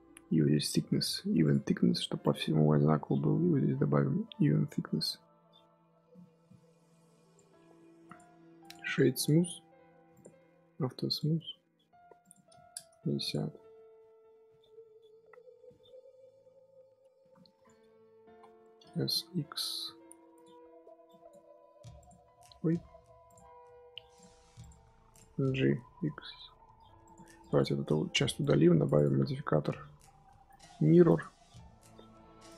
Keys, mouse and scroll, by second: 1.3 click, 2.1-5.3 drag, 7.6-8.0 scroll down 4, 8.0 click, 8.5 click, 8.7-10.0 right drag, 10.0 click, 11.0 click, 12.1-13.2 drag, 13.4 scroll down 2, 13.5 scroll up 1, 13.6-16.5 middle drag, 16.5 scroll up 1, 16.8 KP_3, 17.1 KP_1, 17.3-17.9 scroll up 5, 17.9 Tab, 18.2 z, 18.5 shift+middle click, 18.9 s, 21.0 click, 23.2 click, 24.0 click, 24.5 click, 25.0 click, 25.3 g, 27.5 click, 29.0 x, 29.1 Tab.